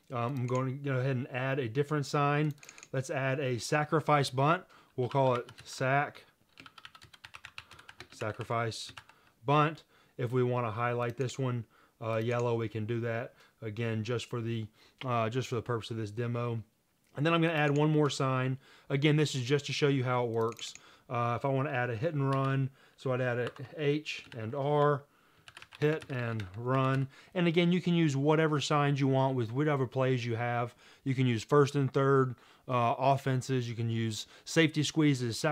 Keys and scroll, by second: 4.9-9.6 typing, 22.4 typing, 23.5-24.4 typing, 24.8 Tab, 25.5-27.5 typing.